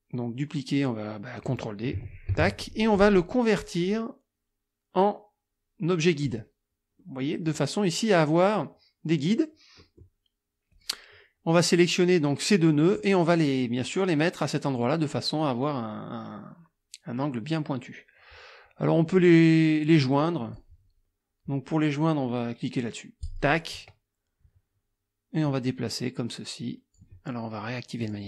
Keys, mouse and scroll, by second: 2.3 ctrl+d, 3.8 click, 6.2 click, 7.0 click, 9.8 click, 10.7 click, 12.0-13.2 drag, 20.0 click, 23.2 click, 25.4-27.2 drag, 28.0 click.